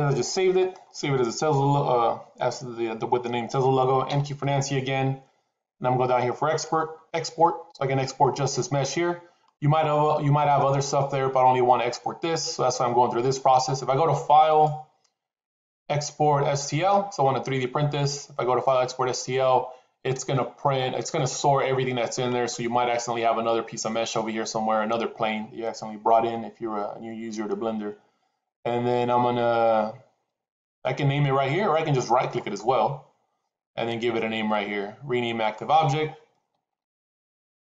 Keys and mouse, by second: 4.0 n, 6.4 click, 14.4-20.0 drag, 32.2-37.6 right drag.